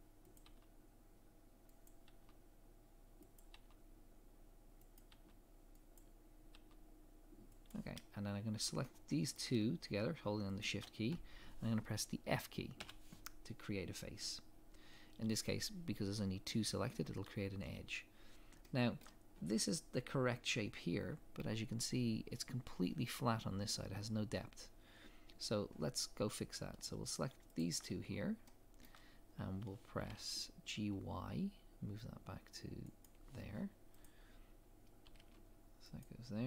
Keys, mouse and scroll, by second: 8.8 shift+middle click, 10.6 shift+click, 12.8 f, 18.6 shift+middle click, 26.2 scroll up 1, 27.2 click, 27.6 shift+click, 28.5 shift+middle click, 30.0 g, 34.0 click, 35.1 g.